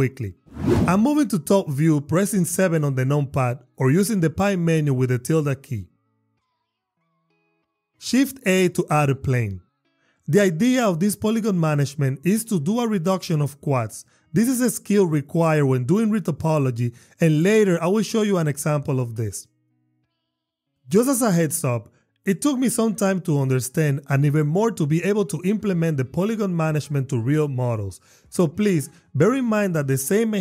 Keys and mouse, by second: 2.7 KP_7, 4.1 shift+a, 5.4 `, 7.9 shift+a.